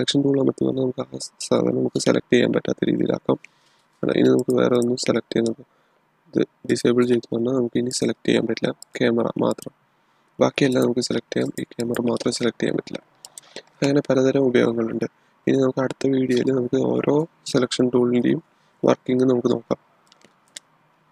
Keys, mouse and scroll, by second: 4.3 click, 7.0 click, 20.0 click.